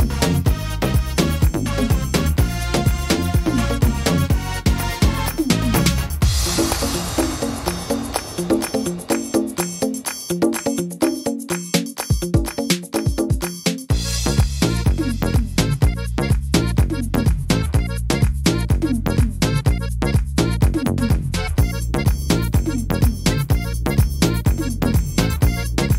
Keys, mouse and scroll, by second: 0.3 right click, 0.8 shift+right click, 1.2 f, 1.6 middle click, 2.8 ctrl+z, 3.0 middle click, 4.5 shift+right click, 5.0 shift+right click, 5.3 middle click, 6.4 f, 6.6 middle click, 7.5 right click, 8.0 shift+right click, 8.7 right click, 9.3 shift+right click, 9.7 middle click, 11.0 f, 11.2 middle click, 12.2 right click, 12.7 shift+right click, 13.5 click, 15.3 right click, 15.8 shift+right click, 16.5 click, 19.2 middle click, 19.9 middle click, 19.9-20.2 scroll down 2, 20.4 scroll down 1, 20.8 scroll up 2, 21.2 middle click, 21.8 middle click, 23.0 ctrl+r, 24.2 right click, 24.9 shift+right click, 25.8 click.